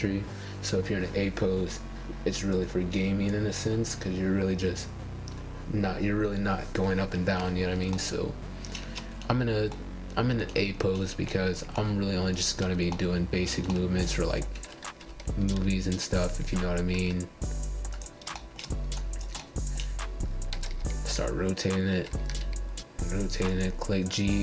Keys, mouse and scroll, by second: 1.2 click, 2.6 g, 4.3 click, 5.1 click, 5.5 g, 6.8 click, 7.2 g, 7.8-13.8 middle drag, 13.8-14.7 scroll up 4, 14.7-16.4 middle drag, 16.4-17.0 scroll down 2, 17.0 click, 18.4 x, 19.4 middle click, 20.2 click, 20.5 x, 21.2-22.2 middle drag, 22.2 click, 22.7-24.4 middle drag.